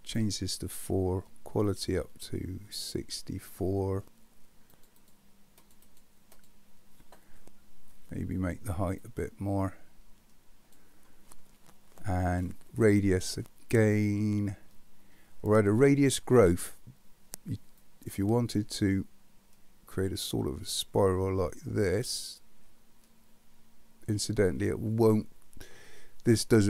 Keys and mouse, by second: 0.1 click, 1.7-3.6 drag, 4.7 click, 5.0 click, 5.8 click, 6.4 click, 9.1-10.7 drag, 17.8-24.5 drag, 26.0-26.6 middle drag.